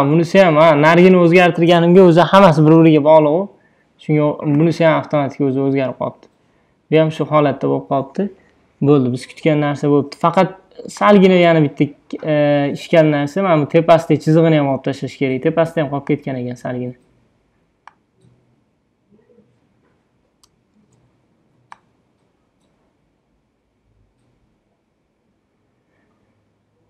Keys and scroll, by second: 20.9 super+d.